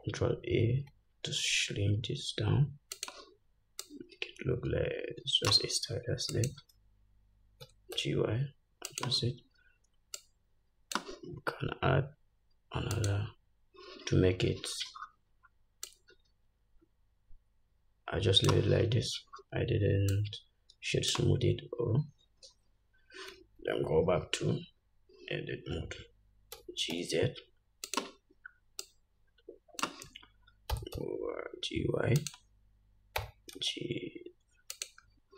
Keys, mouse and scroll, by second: 1.0 ctrl+a, 4.1-6.7 drag, 7.9 g, 10.4-28.2 drag, 19.1 Tab, 24.0 /, 26.8 g, 29.0-32.5 drag, 30.9 g, 33.4 g.